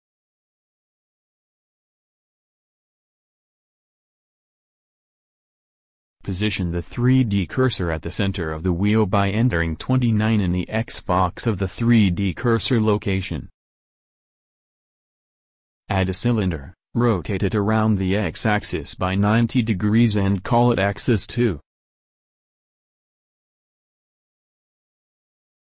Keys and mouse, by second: 16.3 shift+a, 20.4 r, 23.0 click, 23.8 click.